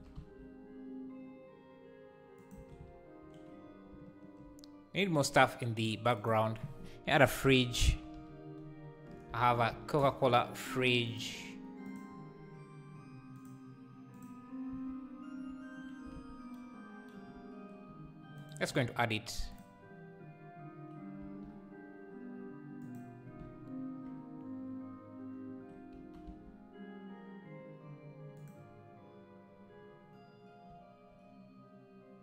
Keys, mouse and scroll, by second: 0.0 shift+d, 2.8 shift+r, 11.2-14.7 drag, 14.7 z, 15.3 scroll down 4, 16.2 alt+a, 18.4 shift+right click, 20.3-21.2 drag, 21.2 s, 26.4 g.